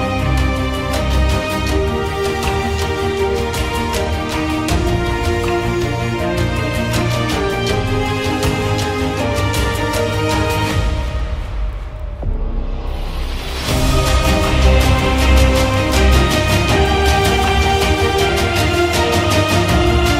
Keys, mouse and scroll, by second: 0.8 click, 1.6-2.0 ], 2.1 right click, 2.4 click, 2.6-3.2 click, 2.8 click, 3.4 ctrl+0, 8.7 click, 10.4-11.6 scroll, 12.2 click, 14.3 click, 15.5 click, 17.1 click, 18.9-20.1 typing.